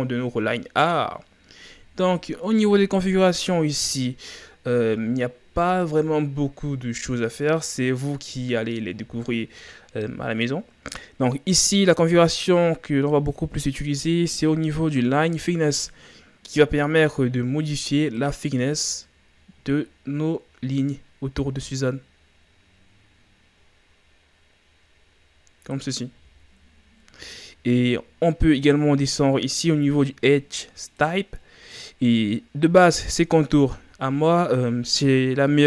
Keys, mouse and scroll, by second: 2.2-26.2 drag, 26.2 a, 28.4-28.7 scroll down 1, 31.0-31.4 drag, 31.4 scroll down 4.